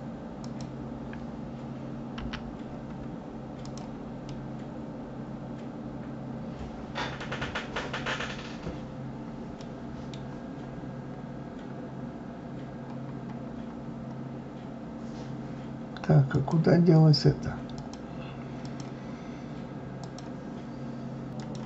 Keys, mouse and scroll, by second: 0.4 click, 2.2 g, 4.3-7.3 middle drag, 8.6-9.1 scroll down 2, 9.1 scroll up 3, 9.6-10.9 middle drag, 10.9-12.1 scroll down 1, 12.1-13.2 scroll down 1, 13.2-16.0 scroll up 7, 16.0-16.3 scroll up 1, 16.3 click, 17.8 click, 18.6 click.